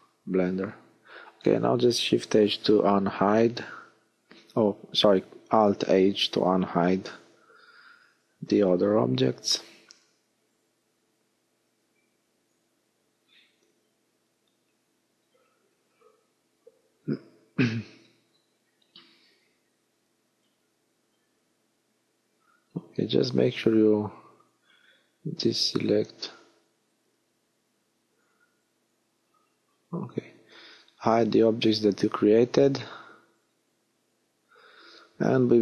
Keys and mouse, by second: 0.9 KP_1, 4.3-6.9 middle drag, 9.0 l, 10.3 l, 14.8 b, 15.7 middle click, 17.0 b, 18.2-19.9 middle drag, 18.5 b, 19.7 b, 19.9 click, 20.6-22.9 middle drag, 25.7 h, 28.0 ctrl+z, 30.1 h, 32.7 middle click.